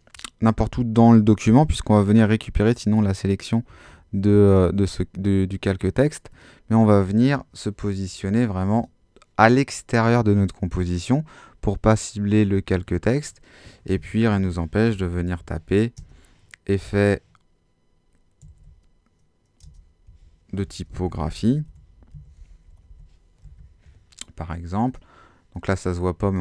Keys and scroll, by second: 3.7 Escape, 14.3-16.0 typing, 18.2-23.4 typing.